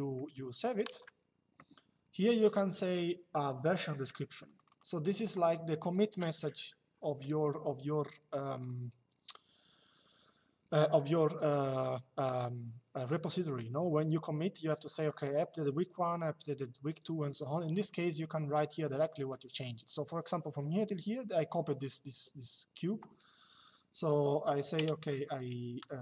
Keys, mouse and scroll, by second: 2.2 click, 4.1 click, 18.0 click.